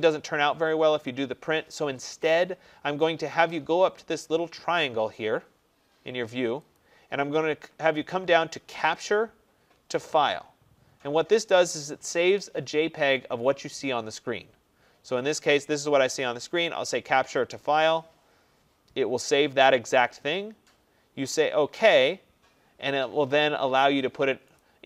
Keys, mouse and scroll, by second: 6.8 click, 17.6 click, 22.1 click, 24.6 click.